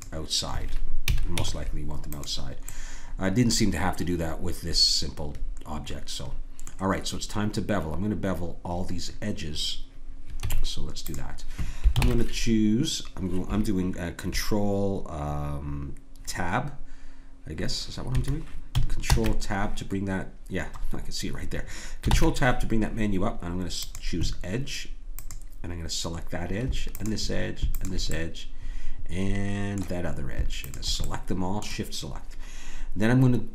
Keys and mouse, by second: 1.0 a, 1.3 Tab, 2.7-3.9 middle drag, 10.4 Tab, 12.0 ctrl+Tab, 19.0 ctrl+Tab, 22.1 ctrl+Tab, 25.1-33.5 drag.